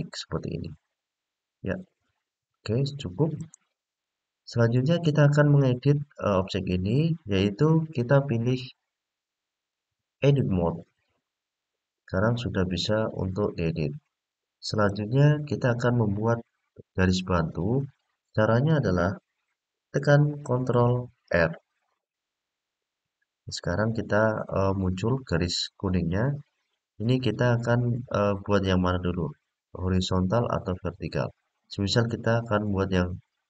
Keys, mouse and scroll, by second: 3.1 click, 3.8 click, 4.8 click, 9.3-10.7 drag, 14.5 click, 22.1 ctrl+r.